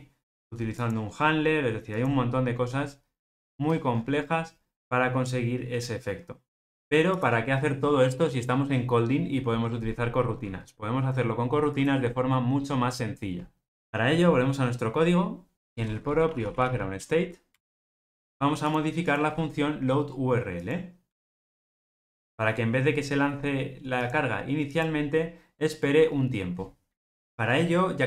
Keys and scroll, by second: 6.7 Escape.